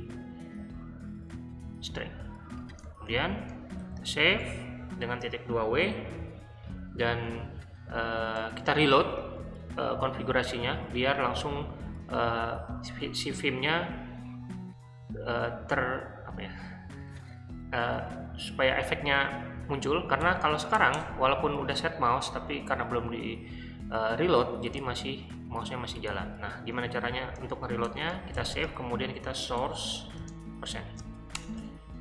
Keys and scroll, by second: 1.3 Escape, 3.1-4.3 typing, 20.2 o, 20.7 Return, 22.1 Escape, 27.2-31.4 typing.